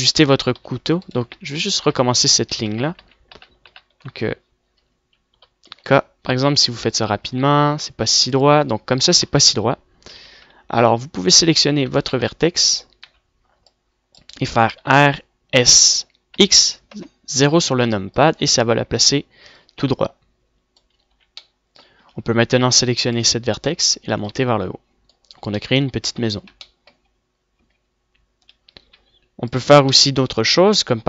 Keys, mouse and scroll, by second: 0.5 click, 0.7 ctrl+z, 2.1 k, 2.7 ctrl+z, 3.0 ctrl+z, 3.3 ctrl+z, 4.1 ctrl+z, 4.5-5.0 ctrl+z, 6.8 KP_7, 7.2 k, 11.6 z, 12.8 click, 13.1 a, 13.4 a, 13.6 c, 14.0 click, 14.6 c, 16.3 r, 22.4 z, 23.3 a, 24.3 click, 26.7 middle click, 27.7 Tab, 28.9 Tab, 29.8 a, 29.9 a, 30.2 a, 30.8 click.